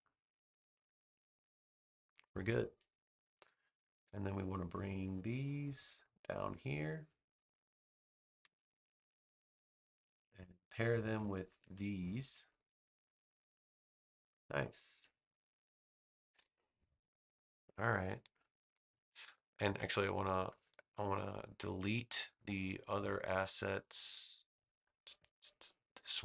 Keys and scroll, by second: 13.0 super+g.